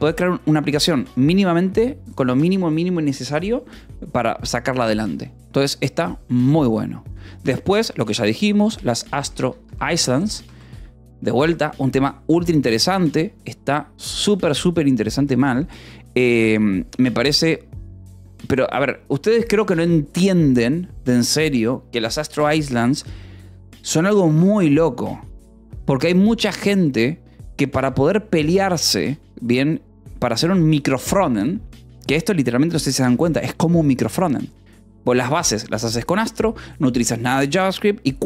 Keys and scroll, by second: 7.6-10.8 typing.